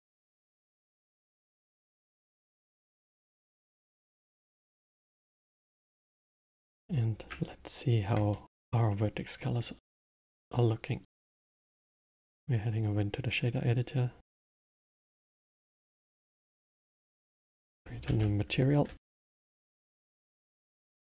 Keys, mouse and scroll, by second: 0.5 click, 4.8-6.6 alt+middle drag, 6.6 z, 8.3-9.7 alt+middle drag, 9.7-11.1 drag, 11.8-20.4 drag.